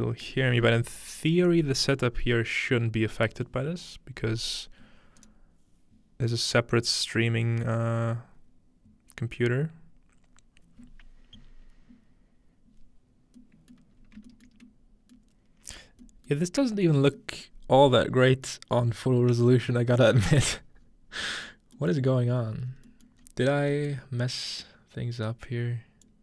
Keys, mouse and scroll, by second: 14.8-26.2 shift+middle drag, 14.8-16.8 scroll up 1, 20.8-22.8 scroll down 1, 22.8-24.8 scroll up 1, 24.8-25.8 scroll up 1, 25.8-26.2 scroll up 1.